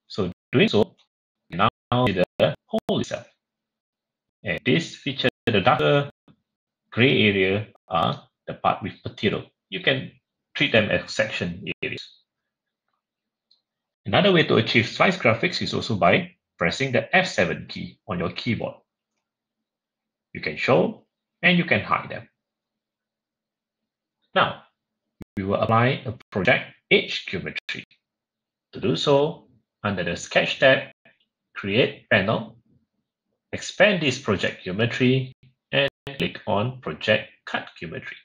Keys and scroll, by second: 18.9 Page_Up, 19.0 F7, 20.8 F7.